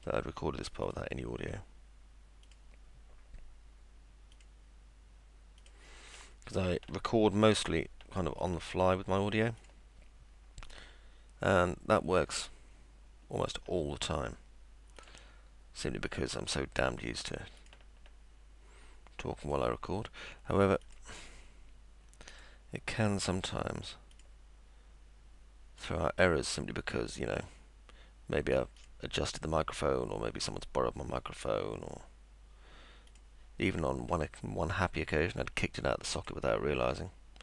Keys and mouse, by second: 0.0 ctrl+click, 0.8 ctrl+click, 2.5 ctrl+click, 4.3 click, 5.6 click, 8.4 click, 9.6 click, 10.7 click, 13.5 ctrl+click, 15.0 ctrl+click, 16.1 ctrl+click, 17.6 ctrl+click, 19.4 ctrl+click, 20.8 ctrl+click, 22.3 ctrl+click, 24.1 ctrl+click, 25.8 ctrl+click, 27.4 ctrl+click, 28.8 click, 33.1 click, 36.2 click.